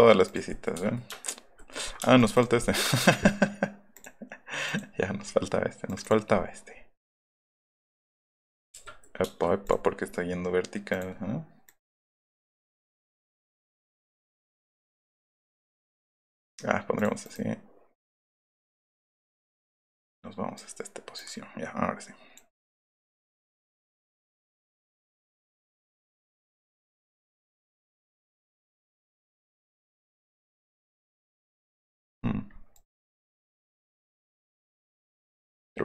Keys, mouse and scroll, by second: 0.2 click, 0.7 ,, 1.3 shift+click, 2.0 space, 2.2 click, 2.3 click, 3.9 click, 4.6 click, 5.9 click, 7.8 click, 8.8 middle click, 9.6 click, 10.9 click, 11.6 click, 13.9 click, 16.2 middle click, 16.9 click, 17.2 right click, 17.9 click, 18.3 click, 19.2-20.5 drag, 21.2-22.3 middle drag, 24.2-25.5 middle drag, 25.5 click, 26.7-28.1 drag, 29.0-30.3 middle drag, 32.0 middle click, 32.9 click, 34.4 middle click.